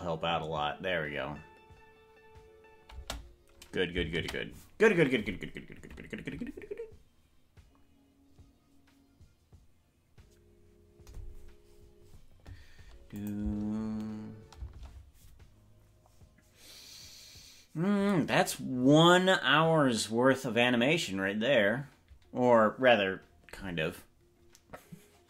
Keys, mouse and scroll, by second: 3.1 space, 7.5 ctrl+s, 13.2 click, 13.5 space, 14.7 space.